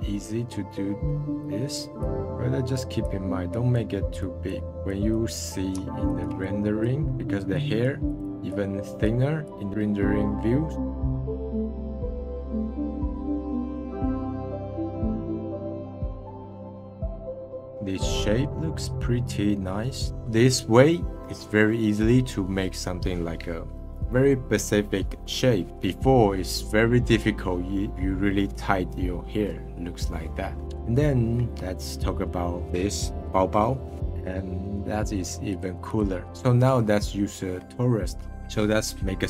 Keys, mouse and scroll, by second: 0.5-0.9 scroll up 1, 1.4-5.7 drag, 5.7 f, 6.2 f, 6.4-9.7 drag, 10.7 click, 11.0 scroll down 4, 11.1 middle click, 11.3 click, 11.8 scroll down 1, 11.8 middle click, 12.3 click, 12.4 f, 12.5 middle drag, 12.6 click, 13.0 middle click, 13.4 click, 13.4 middle click, 13.8 click, 13.9 scroll up 1, 14.0 click, 14.3 middle drag, 14.4 click, 14.5 middle click, 14.8 click, 15.1 middle click, 15.4 drag, 15.7 middle click, 15.8 click, 15.9 middle click, 15.9 scroll down 2, 16.0 middle click, 16.5 scroll up 2, 16.8 click, 16.9 middle click, 17.1 click, 17.2 scroll down 2, 17.3-17.7 drag, 17.7 middle drag, 17.9 scroll down 1, 18.2-20.1 middle drag, 25.7-26.9 scroll up 2, 35.5-36.2 drag, 37.6 shift+a.